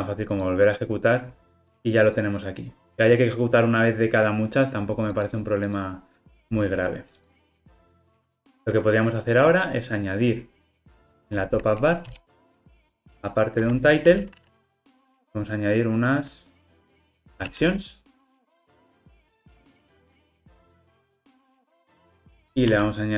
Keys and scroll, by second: 19.2 Return, 20.5 alt+super+l.